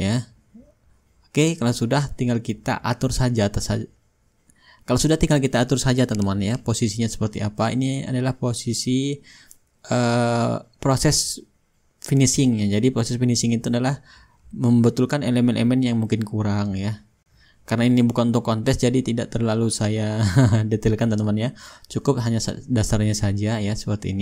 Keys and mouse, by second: 2.1-22.5 ctrl+shift+drag, 4.7-5.6 right drag, 6.2 right click, 23.4-24.2 drag.